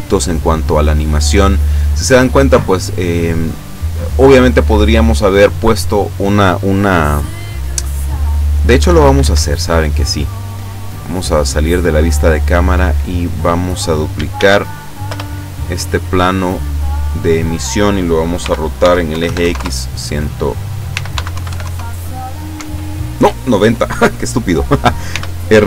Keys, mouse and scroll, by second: 8.7 Escape, 9.5 scroll down 1, 10.8 middle click, 11.8 scroll down 1, 12.2 middle click, 13.5 right click, 14.4 shift+d, 15.1 Return, 15.8-16.9 drag, 17.1 middle click, 18.4-19.4 typing, 19.6 KP_Enter, 20.9-21.6 typing, 22.6 Escape, 25.1 r.